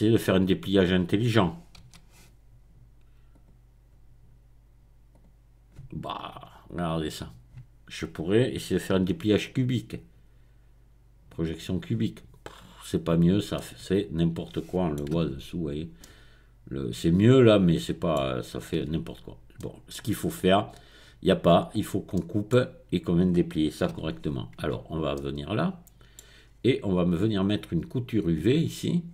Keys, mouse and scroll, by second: 1.9 u, 3.3 click, 5.1 click, 6.5-7.2 scroll up 1, 9.0 u, 11.3 click, 13.6-15.0 middle drag, 15.2 Tab, 18.8 Tab, 19.0-19.6 scroll down 1, 20.7 click, 21.7-22.1 scroll up 1, 22.1-23.3 middle drag, 23.3-23.8 scroll up 1, 23.8-25.1 scroll up 1, 23.9 Tab, 24.5 Tab, 25.1-26.5 middle drag, 26.5-27.2 scroll up 1, 27.5-28.4 scroll down 1, 29.0-29.1 scroll down 1.